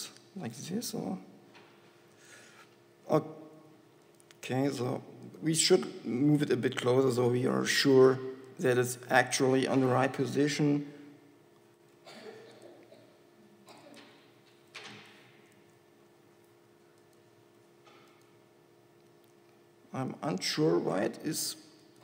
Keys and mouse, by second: 1.3 r, 3.6 s, 5.0 g, 5.8 KP_1, 7.0 g, 9.5 KP_7, 12.2 g, 13.2 r, 16.6 click, 16.6 g, 17.8 g, 19.6 g, 21.6 g.